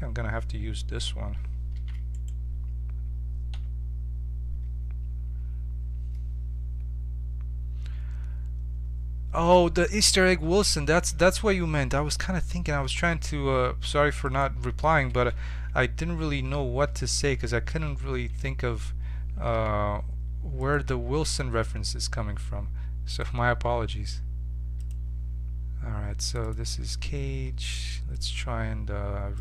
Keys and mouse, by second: 1.7 shift+d, 3.5 Tab, 11.1 e, 15.7 KP_1, 17.8 a, 18.3 a, 19.4 g, 20.9 Tab, 23.1-24.9 drag, 26.4-29.4 drag.